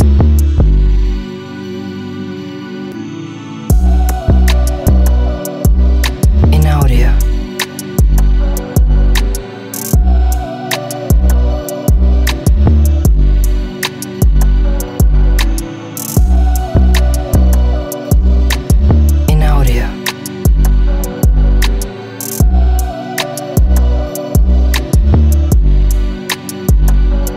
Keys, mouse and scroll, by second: 1.3 z, 2.6 click, 4.6 ctrl+z, 6.0 click, 7.4 e, 8.3 s, 10.9 click, 12.0 z, 15.1 click, 17.1 click, 18.0 click, 20.8 click, 22.1 middle click, 24.4 click, 26.2 click.